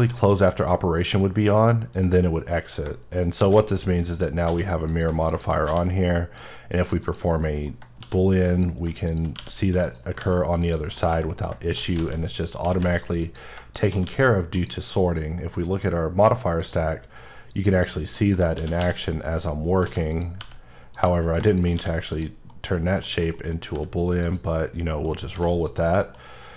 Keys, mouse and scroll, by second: 3.1 shift+right click, 3.4 shift+a, 4.1 click, 4.5 s, 4.9 click, 5.6 q, 6.4 click, 7.0 double click, 7.5 middle click, 8.0 shift+d, 9.1 click, 9.3 q, 9.8 click, 10.2 g, 10.6 click, 10.9 middle click, 11.2 scroll down 1, 11.6 shift+d, 12.0 z, 12.3 click, 12.6 s, 13.2 click, 14.0 q, 14.6 click, 18.1 middle click, 18.5 shift+d, 18.9 x, 19.3 right click, 19.8 s, 20.1 click, 20.4 g, 20.9 click, 21.7 q, 22.1 click, 22.5 middle click, 23.7 g, 24.2 click, 24.5 middle click, 25.3 h, 25.7 click, 25.9 middle click.